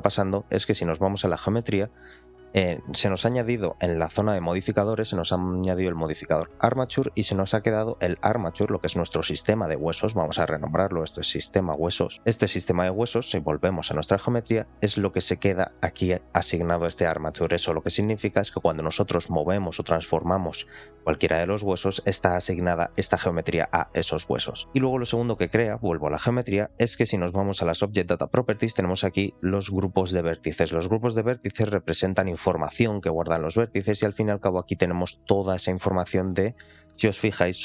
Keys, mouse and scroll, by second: 1.3 click, 6.1 click, 8.8 click, 9.6 F2, 13.7 click, 18.3 click, 18.7-19.4 scroll down 2, 19.4 g, 20.8-21.5 drag, 22.2 click, 22.6 r, 24.6 click, 24.6-25.3 scroll up 2, 25.3 click, 28.4 click, 30.0-31.2 drag, 32.4 click, 33.9 click, 35.3-37.3 drag.